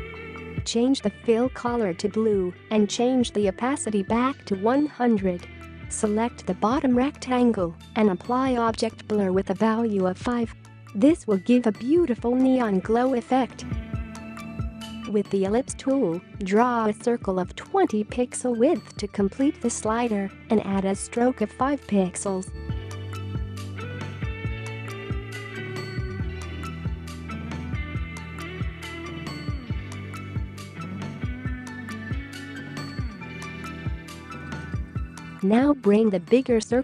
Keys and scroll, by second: 12.2 5, 12.6 Return, 21.5 typing, 22.1 Return, 26.9 typing, 27.2 Return, 28.6 v, 34.8 space.